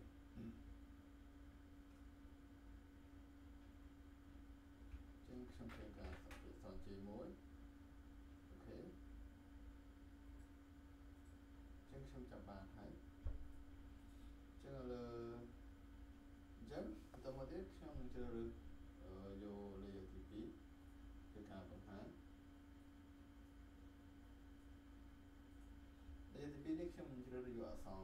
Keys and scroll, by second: 6.0 ctrl+j.